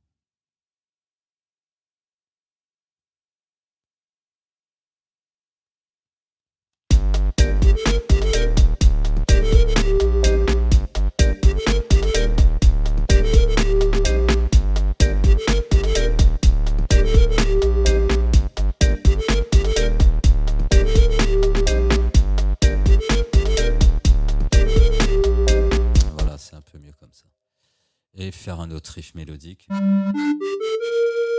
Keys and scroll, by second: 1.5 Delete, 6.9 ctrl+space, 26.3 space.